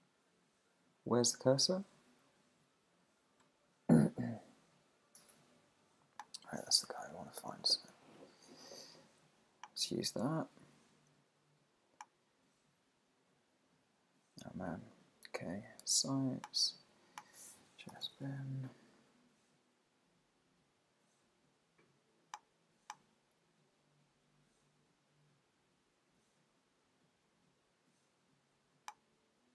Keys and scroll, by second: 1.2 Up, 1.6 Down, 2.2 Up, 2.7 Down, 6.8 super+/, 18.5 super+Down.